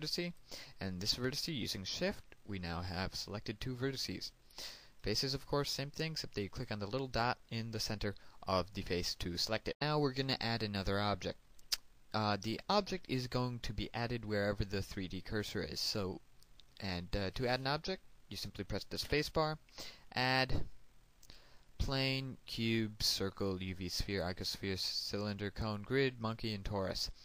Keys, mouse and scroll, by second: 1.5 shift+right click, 6.2 click, 7.7 right click, 9.6 click, 20.4 space.